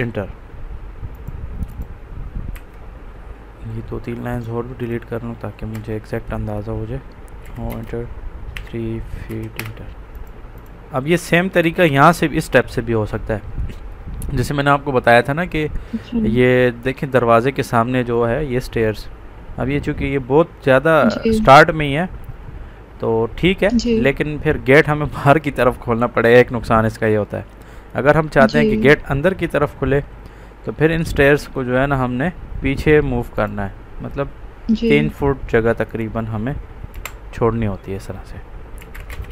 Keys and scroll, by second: 2.5 Escape, 5.6 Delete, 7.3 o, 7.6 space, 8.5 2, 9.2 1, 9.5 Return, 11.5 Escape, 36.8 Delete, 38.4-39.3 typing.